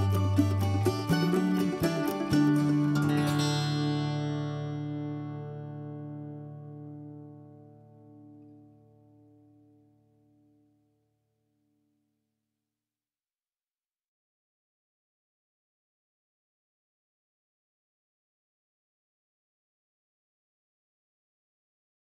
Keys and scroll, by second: 12.2 1.